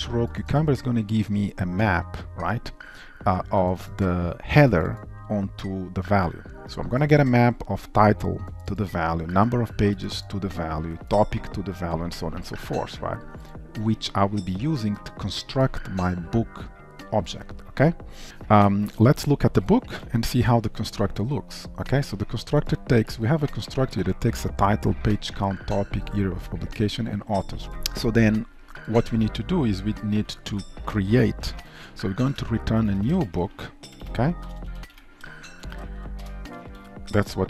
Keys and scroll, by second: 20.1 ctrl+b, 32.4 Return.